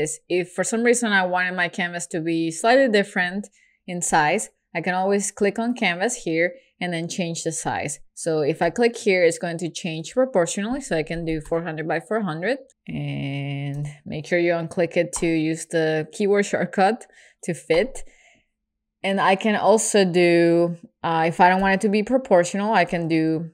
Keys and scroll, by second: 12.9 super+z.